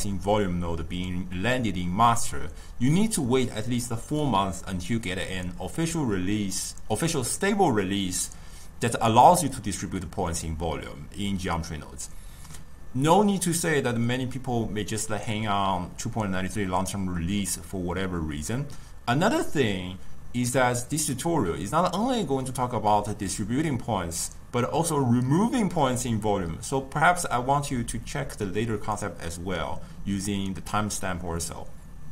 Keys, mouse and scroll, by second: 2.4 shift+middle click, 2.8 click, 3.0 g, 5.7 click, 6.3 ctrl+middle click, 8.5 click, 9.0 middle click, 10.3 g, 11.2 g, 12.3-12.9 middle drag, 12.9 Tab, 13.1 g, 14.0 Tab, 14.2 g, 14.8-15.7 middle drag, 15.7 click, 16.6-19.1 ctrl+middle drag, 19.1 Tab, 19.3 g, 20.2 Tab, 20.6 g, 21.5 scroll down 1, 21.7-22.0 middle drag, 22.0 drag, 22.2-23.0 ctrl+middle drag, 23.0-24.9 shift+drag, 24.9 middle click, 25.8 click, 26.5-28.2 drag, 31.0-31.5 middle drag, 31.5 click, 31.7 g.